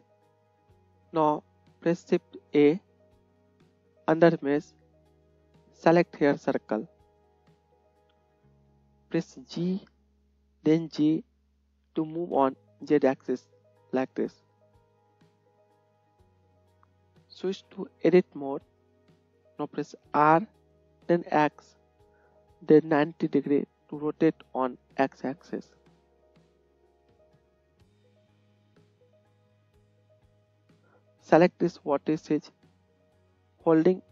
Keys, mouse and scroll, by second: 0.6-17.4 drag, 2.8 shift+a, 9.6 g, 20.1 r, 26.1-28.9 middle drag, 28.9-34.1 drag, 31.6 middle click, 31.6 right click.